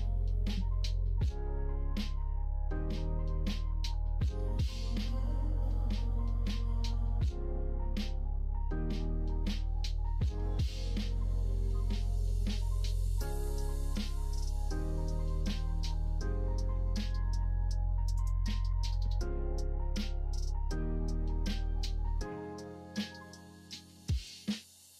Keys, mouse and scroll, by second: 1.4 ctrl+j, 2.1 middle click, 2.7 ctrl+s, 4.3 middle click, 6.1 click, 8.3 click, 8.7 middle click, 9.3-12.6 middle drag, 13.5 click, 15.2 click, 16.9-20.2 drag, 22.2 middle click.